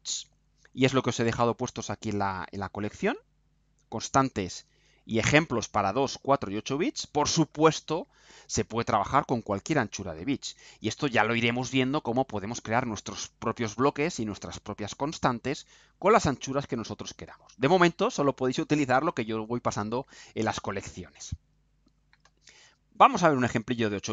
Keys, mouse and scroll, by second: 23.7 click.